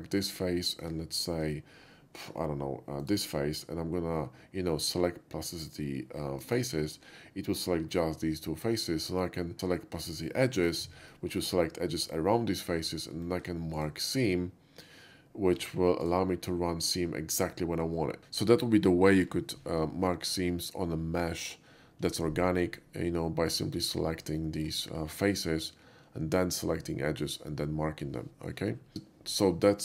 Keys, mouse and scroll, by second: 3.1 shift+click, 6.5 click, 10.1 click, 11.4 shift+middle click, 12.9 shift+middle click, 13.8 shift+right click, 15.6 Tab, 16.1 right click, 16.9 click, 17.6 middle click, 23.3 middle click, 24.5-27.7 shift+middle drag, 28.8 middle click.